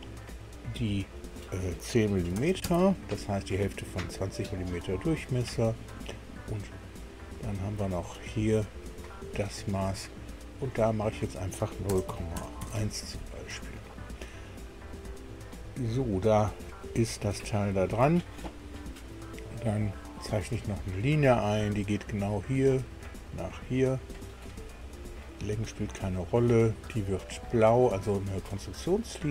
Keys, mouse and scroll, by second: 0.8 click, 2.2 KP_1, 2.4 KP_0, 2.6 KP_Enter, 5.2-5.8 scroll up 1, 7.9 click, 9.0 click, 10.6 click, 11.9 KP_0, 12.0 KP_Decimal, 12.3 KP_1, 12.6 KP_Enter, 14.2-14.6 scroll down 1, 15.6 scroll down 2, 16.9 scroll up 1, 17.4 shift+middle click, 20.4 click, 22.4 click, 24.1 click, 24.8 right click, 26.0 click, 27.8 click.